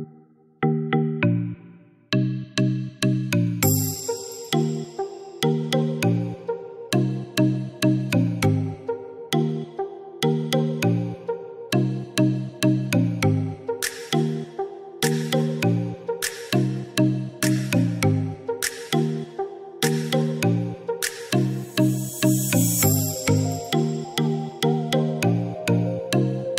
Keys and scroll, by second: 23.7 ctrl+v.